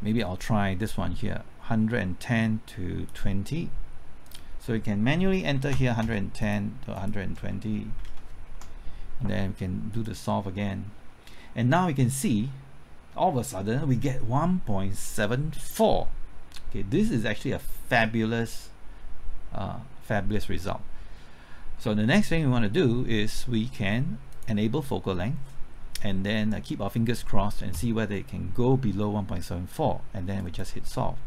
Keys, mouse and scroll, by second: 5.3 KP_1, 6.0 KP_0, 6.4 click, 7.4 KP_1, 7.9 KP_2, 8.1 KP_0, 8.5 KP_Enter, 9.9 click.